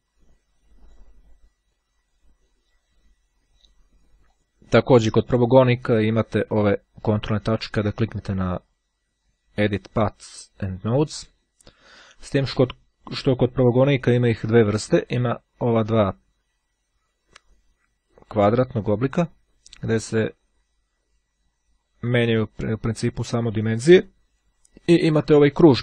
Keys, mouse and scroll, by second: 0.9 click, 1.8 click, 4.3 click, 6.8-7.3 ctrl+scroll up 2, 7.6-8.3 ctrl+scroll up 2, 11.8-12.3 scroll down 2, 17.1-22.7 drag, 23.5-25.0 drag.